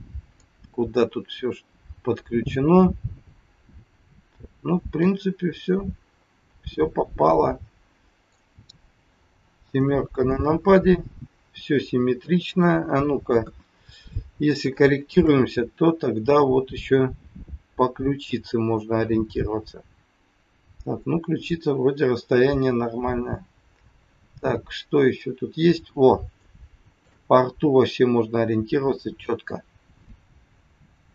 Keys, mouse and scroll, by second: 0.3 middle click, 8.9 scroll down 2, 9.6 KP_7, 12.2 middle click, 13.4 KP_1, 13.9-14.2 scroll down 4, 14.8 shift+middle click, 16.2-16.6 scroll up 1, 23.3-23.9 scroll up 3, 25.7 scroll up 3, 26.4 shift+middle click, 27.4 scroll up 1, 30.9-31.1 scroll down 2.